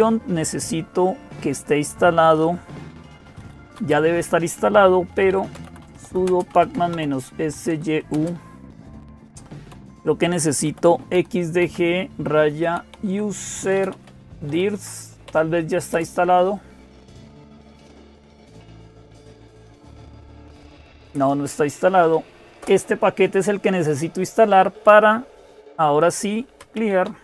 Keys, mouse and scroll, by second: 0.0-27.2 typing, 15.7 Return, 22.4 Return.